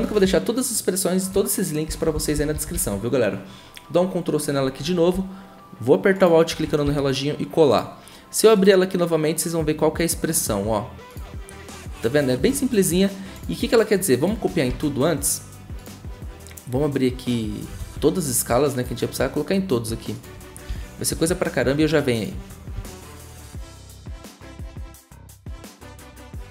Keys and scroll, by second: 1.9 ctrl+c, 2.1 ctrl+c, 2.3 ctrl+c, 6.8 ctrl+v, 14.7 ctrl+c, 17.8 ctrl+z, 20.7 s, 23.5 ctrl+v, 23.6 ctrl+v, 23.7 ctrl+v, 23.8 ctrl+v.